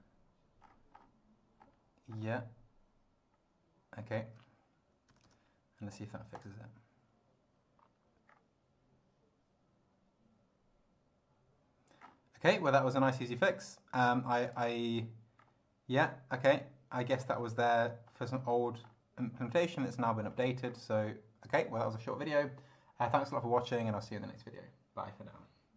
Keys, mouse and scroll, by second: 0.7-1.2 scroll up 4, 1.6 scroll up 2, 2.2 scroll up 2, 4.0 scroll down 2, 5.1 BackSpace, 6.4 click, 8.3 scroll down 2, 12.0 scroll down 2, 13.1 click, 14.5 click, 15.4 scroll down 2, 16.5 scroll down 2, 17.1 scroll up 2, 18.1-19.1 scroll up 6, 20.3 scroll up 2, 20.7 scroll down 2.